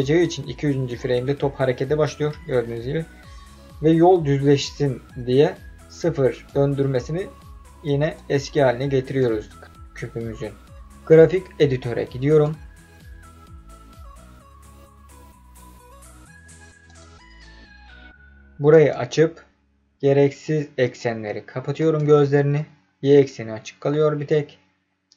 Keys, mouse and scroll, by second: 0.9-6.4 drag, 8.1 click, 12.3-17.0 drag, 18.7 click, 20.8 click, 21.7 click.